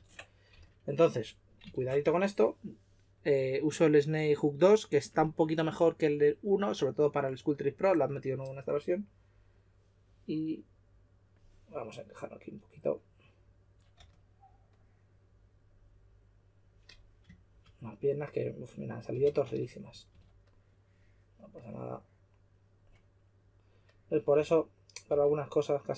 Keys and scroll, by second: 0.5 s, 13.9 s, 19.1-20.1 typing, 24.3-25.1 typing.